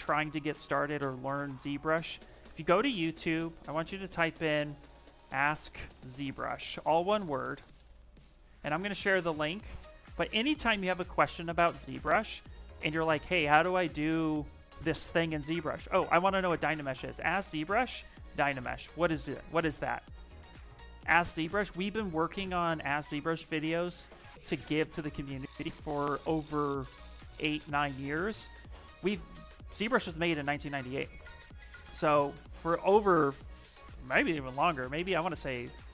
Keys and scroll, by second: 5.0-7.4 typing, 8.5 Return, 16.7-18.6 typing.